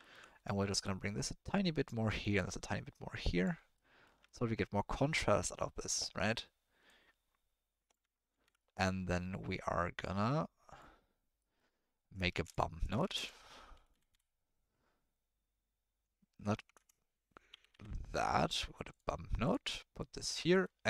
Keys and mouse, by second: 0.1 ctrl+middle click, 0.8-1.8 drag, 2.5 click, 3.7-4.0 drag, 4.2-4.8 ctrl+drag, 4.8-5.9 ctrl+middle drag, 6.8-7.9 drag, 8.3 ctrl+z, 8.6 middle click, 9.4 middle click, 10.0 click, 12.5 click, 12.8 click, 13.0 shift+a, 16.6 BackSpace, 16.8 BackSpace, 20.0 click.